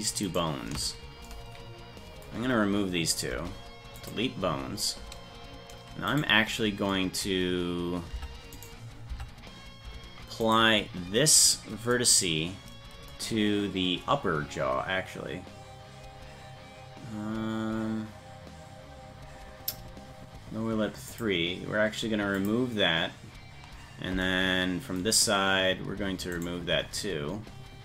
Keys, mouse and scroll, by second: 0.3 shift+right click, 3.3 Delete, 6.2 right click, 8.2 Tab, 8.6 right click, 9.1 Tab, 10.5 right click, 11.6 right click, 21.1 click, 22.4 click, 26.4 right click.